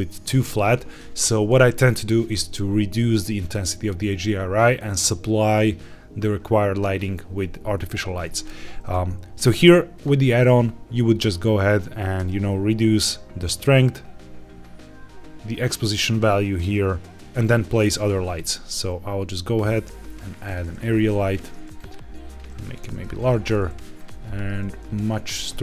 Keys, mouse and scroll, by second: 9.9 click, 10.3-12.0 scroll up 4, 12.2-17.2 shift+drag, 17.2-18.0 scroll down 1, 18.2 shift+a, 20.7 g, 20.9 z, 21.2 click, 21.7 click, 22.7 g, 22.8 z, 23.1 click, 23.9-25.6 drag, 25.4 KP_0.